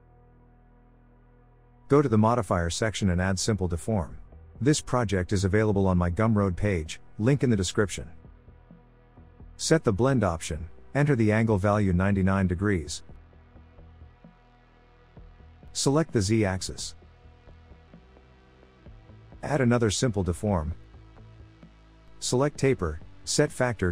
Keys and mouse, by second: 3.9-6.2 drag, 11.3-14.6 drag, 12.8 9, 19.2-20.9 drag, 22.9 click.